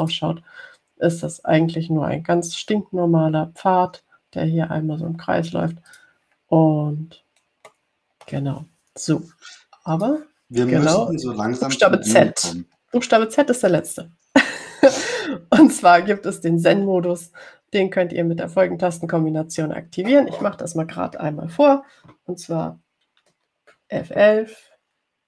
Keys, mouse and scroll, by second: 0.3 click, 1.2 click, 7.1 click, 8.9-10.0 middle drag, 8.9-10.0 scroll down 1, 11.2 click, 11.7-12.8 scroll down 3, 13.4 ctrl+scroll down 2, 14.0-15.2 scroll down 4.